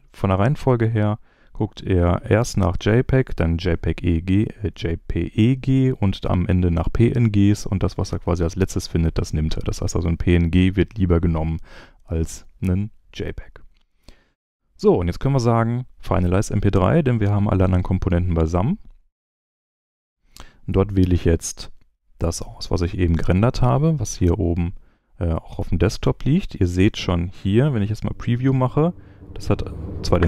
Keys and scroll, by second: 26.7 space.